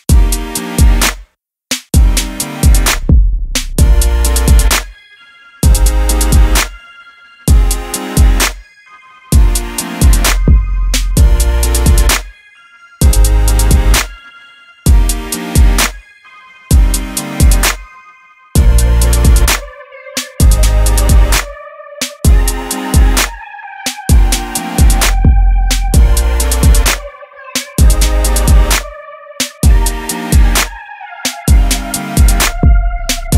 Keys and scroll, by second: 7.9 Right, 17.3 super+e, 31.6 super+d.